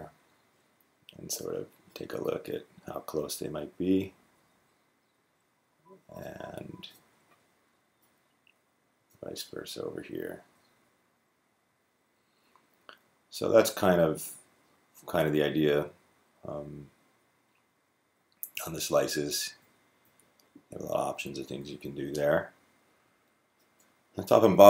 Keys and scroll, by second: 3.5 Down, 3.9 Down, 4.1 Down, 4.2 Down, 4.3 Down, 9.7 g, 10.2 g, 10.3 g, 10.3 g, 10.5 Left, 10.6 Left, 11.0 Left, 11.8-12.6 Left, 21.3 Right.